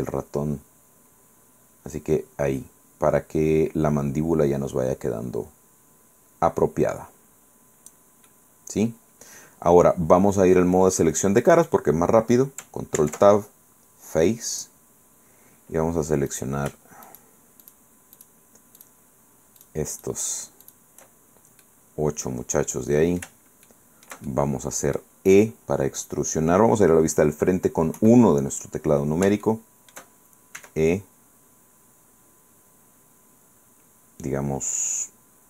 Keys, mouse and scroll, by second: 3.0 scroll down 1, 8.4-11.3 drag, 13.1 ctrl+Tab, 14.7 click, 16.4 click, 17.2 shift+right click, 17.7 shift+click, 18.3 shift+click, 18.9 shift+click, 19.7 shift+click, 20.1 shift+right click, 20.7 shift+right click, 21.7-23.5 middle drag, 23.8-25.3 shift+middle drag, 28.1 KP_1, 29.5 shift+middle click, 30.7 e.